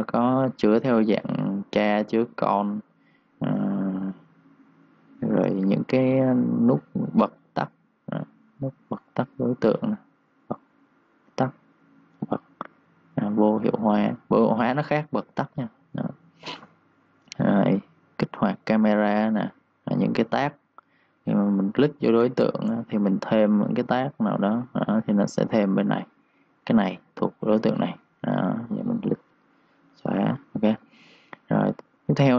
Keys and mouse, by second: 0.8 click, 6.5 click, 8.7 1, 8.8 click, 14.5 3, 14.6 click, 15.0 2, 15.1 click, 15.6 1, 15.7 click, 22.5 right click, 24.6 click, 30.0 Delete, 30.3 click.